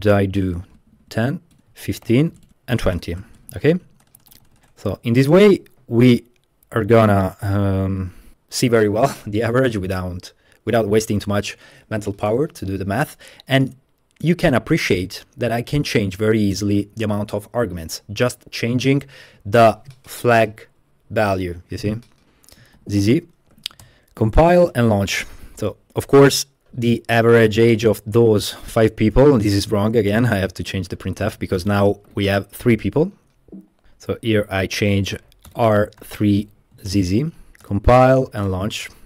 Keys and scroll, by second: 0.0-5.0 typing, 1.0 Tab, 1.1 Tab, 3.5 Tab, 3.7 Tab, 3.9 Tab, 4.6 Tab, 5.6 Escape, 22.3 Escape, 22.8-25.7 typing, 23.8 Return, 32.1 v, 32.3 Return, 33.9-38.2 typing, 38.5 Return.